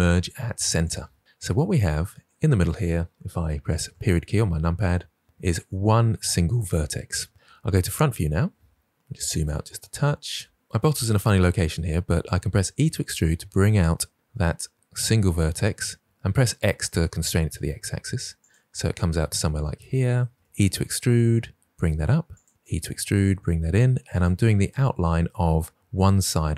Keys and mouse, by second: 3.8 KP_Decimal, 7.7 KP_1, 12.6 e, 16.0 x, 18.3 click, 20.4 e, 22.2 click, 22.5 e, 24.0 click, 24.6 shift+middle drag.